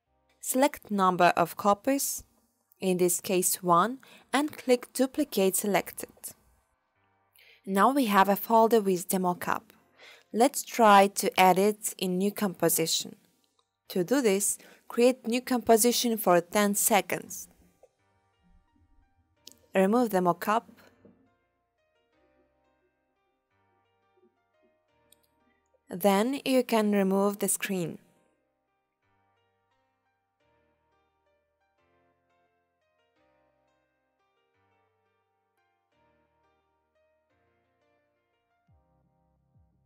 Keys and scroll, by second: 27.3-28.4 typing.